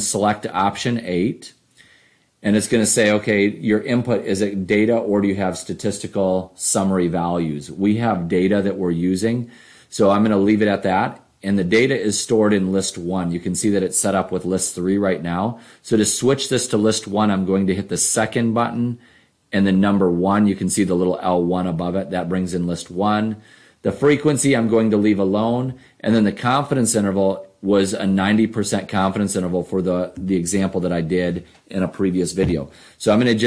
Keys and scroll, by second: 0.6 Return, 10.4 Down, 19.9 1, 24.0 Down, 25.6 Down.